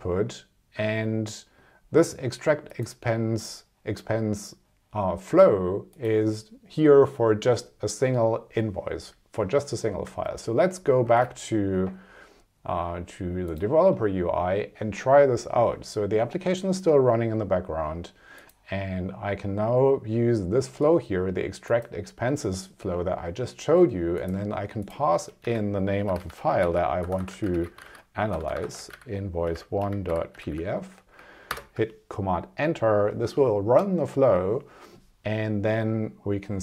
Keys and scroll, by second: 10.0 super+Tab, 25.4 Left, 27.1 BackSpace, 29.6 1, 29.9 ., 30.5 f, 31.5 super+Return.